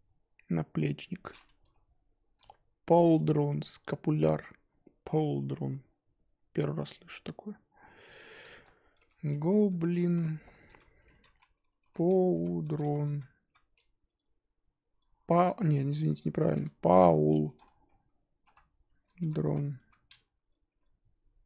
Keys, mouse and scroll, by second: 8.2-20.7 drag.